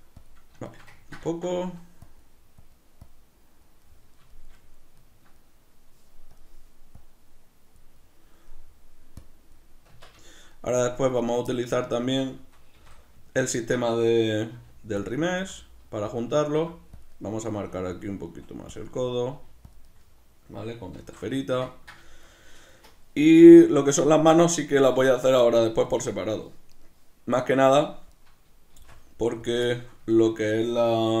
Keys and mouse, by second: 0.2 click, 0.6-2.0 shift+middle drag, 2.0 click, 4.3-6.3 shift+middle drag, 6.3 click, 7.9-9.2 middle drag, 9.2 click, 9.9 b, 10.0 Tab, 10.0 click, 10.3 shift+middle click, 11.2 right click, 12.8 shift+d, 13.6 ctrl+click, 14.3 middle click, 14.6 g, 15.1 click, 15.2 middle click, 15.4 s, 16.2 click, 16.2 middle click, 16.6 g, 17.0 click, 17.1 middle click, 17.6 g, 18.0 click, 18.3 s, 18.8 middle click, 19.4 g, 19.8 click, 19.9-26.7 middle drag, 21.0 alt+o, 26.7-28.8 right drag, 28.8 shift+d, 29.6 click, 29.6-31.2 shift+middle drag.